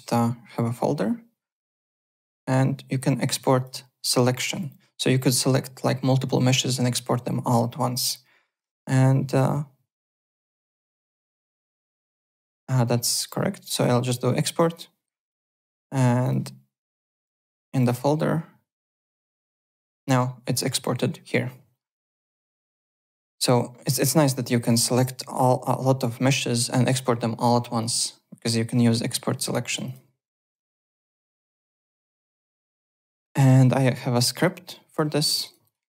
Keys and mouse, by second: 3.3 click, 4.1 click, 13.5 click, 14.7 click, 15.2 click, 16.2 click, 17.1 click, 17.6 click, 19.4 click, 22.1 click, 24.0 click, 27.8 click, 29.8 click, 30.5 alt+Tab, 31.5 alt+click, 34.3 click, 34.9 click, 35.3 `, 35.4 click.